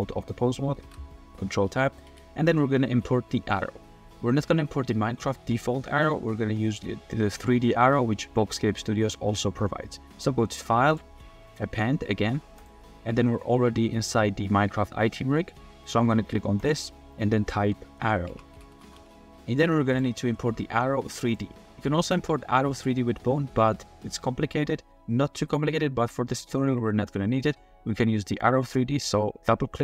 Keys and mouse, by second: 0.8 ctrl+Tab, 2.0 n, 2.6-3.5 middle drag, 6.0-8.8 middle drag, 9.9 click, 10.9-12.7 drag.